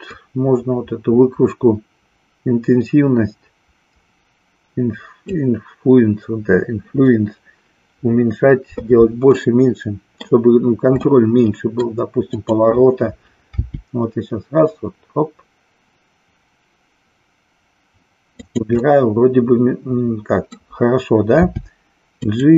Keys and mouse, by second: 0.0-5.4 drag, 9.2-10.4 middle drag, 11.1 middle click, 12.2-13.6 drag, 13.6 g, 18.5 click, 18.9-20.6 middle drag, 21.4 g.